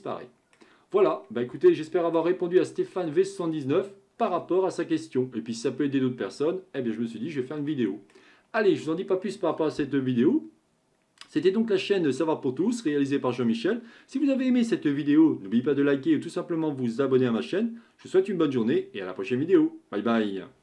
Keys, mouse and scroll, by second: 1.2-1.7 scroll down 1, 1.7-5.8 shift+middle drag, 7.6-10.8 middle drag.